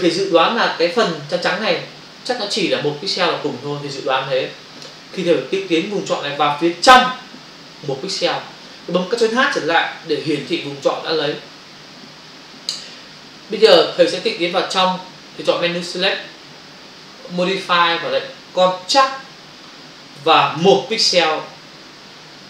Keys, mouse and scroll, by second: 10.9 ctrl+h, 16.0 click, 18.9 click.